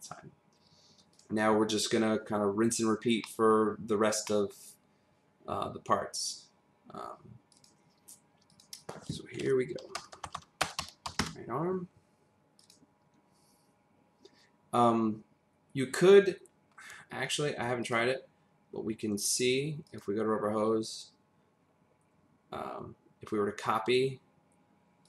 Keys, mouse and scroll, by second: 1.1 click, 3.2 middle click, 3.7-4.2 scroll down 1, 4.2 middle click, 7.5 click, 8.5 click, 9.8-11.2 typing, 12.6 click, 17.8 click, 19.8 click.